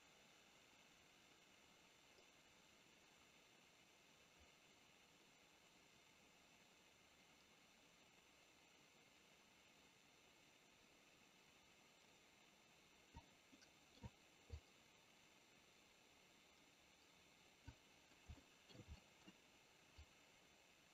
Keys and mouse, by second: 13.5 middle click, 14.5-17.7 drag, 18.4 shift+middle click, 18.9 middle click, 20.0-20.9 drag.